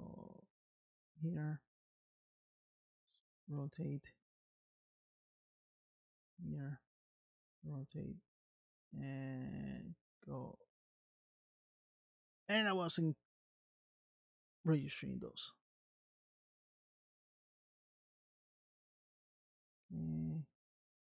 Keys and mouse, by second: 2.2 r, 5.2 click, 6.2 r, 8.3 r, 13.8 click, 16.2 r, 18.6 click, 20.2 r.